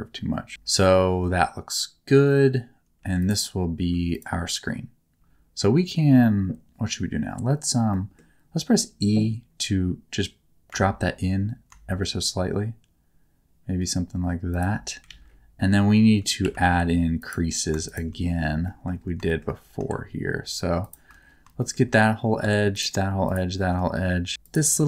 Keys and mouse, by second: 3.0 3, 3.2 click, 5.6 middle click, 7.9 middle click, 11.1 e, 14.5 shift+click, 15.1 alt+z, 16.4 2, 17.2 alt+middle click, 18.6 shift+middle click, 19.3 shift+middle click, 20.8 alt+shift+click, 21.6 shift+middle click, 23.2 alt+shift+click.